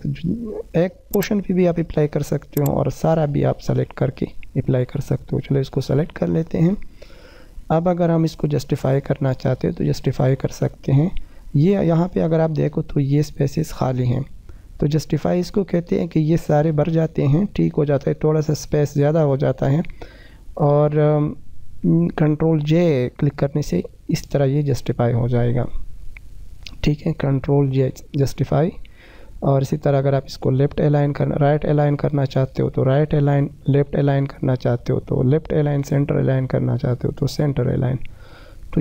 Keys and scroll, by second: 20.8 ctrl+j, 26.6 ctrl+l, 27.2 ctrl+l, 30.2 ctrl+r, 34.2 ctrl+e, 38.7 ctrl+l.